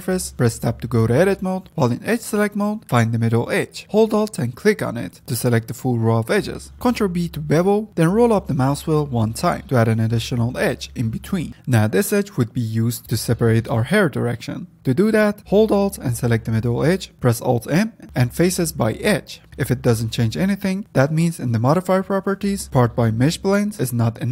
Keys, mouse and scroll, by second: 1.5 Tab, 5.0 alt+click, 6.7 ctrl+b, 13.0 alt+click, 14.3 click, 16.5 alt+click, 17.9 alt+m, 19.6 Tab, 20.3 click, 21.1-24.3 shift+middle drag.